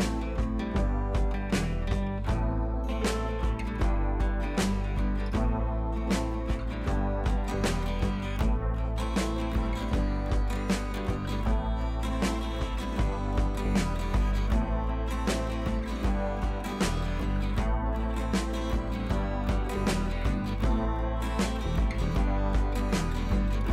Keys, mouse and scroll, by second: 2.1 ], 2.7 click, 7.2-8.3 scroll up 1, 15.2-17.7 drag.